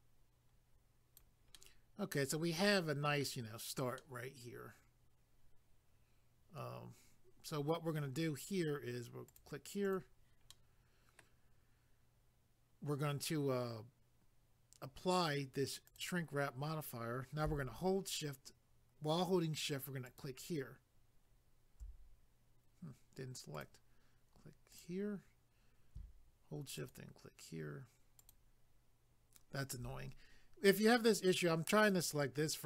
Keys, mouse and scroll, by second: 1.5 middle click, 4.0 middle click, 9.3 click, 9.4 click, 9.8 click, 9.9 click, 10.5 middle click, 15.9 click, 16.0 click, 20.0 shift+click, 20.2 shift+click, 22.0-23.1 scroll down 1, 23.1 scroll down 1, 23.6 click, 23.6 click, 24.7 click, 24.8 click, 26.8 shift+click, 28.2 shift+click, 31.8 click.